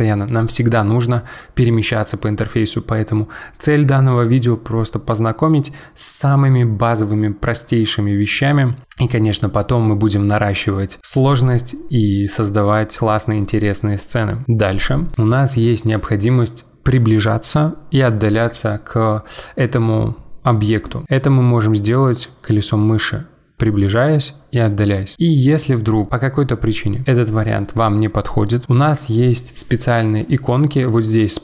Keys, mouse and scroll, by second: 23.3-24.4 scroll up 5, 24.4-24.7 scroll down 5.